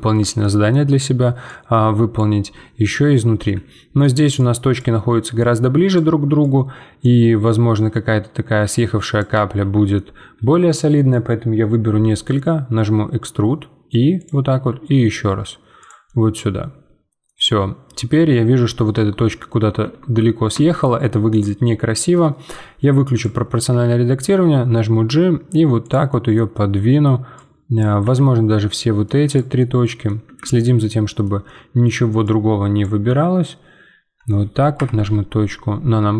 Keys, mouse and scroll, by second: 0.8-1.4 scroll up 2, 1.4 click, 2.4-3.4 scroll down 2, 3.4 z, 4.3-7.8 drag, 9.6 z, 9.9-11.8 middle drag, 11.8 e, 14.5 e, 16.0-17.4 middle drag, 17.4-18.2 scroll down 1, 18.2 scroll up 2, 18.6 z, 19.2 z, 19.8 Tab, 20.5 Tab, 21.3-24.2 drag, 24.2 g, 26.1-27.3 middle drag, 27.3 click, 28.0 z, 28.7 middle click, 29.3 click, 29.6-32.2 middle drag, 32.2 click, 33.0 z, 34.8 KP_Decimal, 35.4-35.8 scroll down 5.